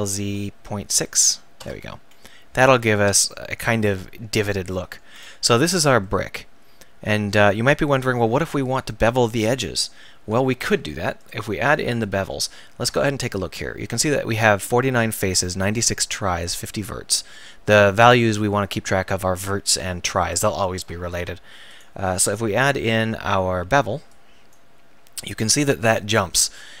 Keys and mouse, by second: 2.3 middle click, 6.2 middle click, 10.6 Tab, 11.2-13.8 drag, 21.7-24.5 drag.